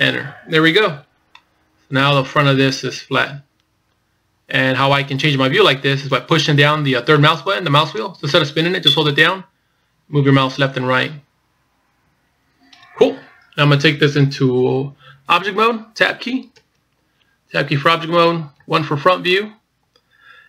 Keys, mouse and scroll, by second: 1.7 middle click, 7.7 middle click, 17.3 Tab, 19.2 KP_1.